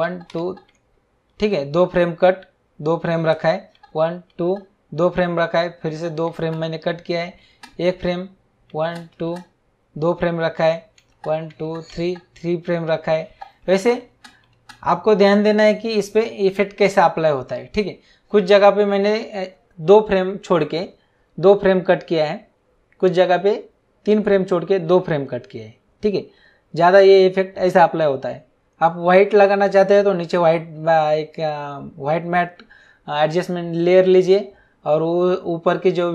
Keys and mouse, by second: 3.7 Right, 5.8 Right, 7.4 Right, 8.7 Right, 11.0 Right, 11.9 Right, 13.2 Right.